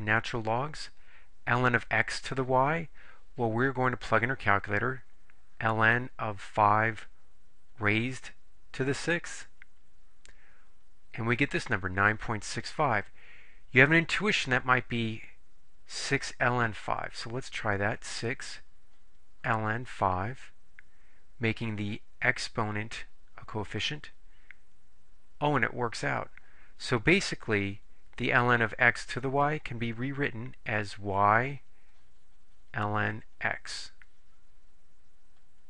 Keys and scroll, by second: 6.6 5, 7.9 ^, 9.0 6, 9.8 Return, 18.2 6, 20.0 5, 24.0 Return.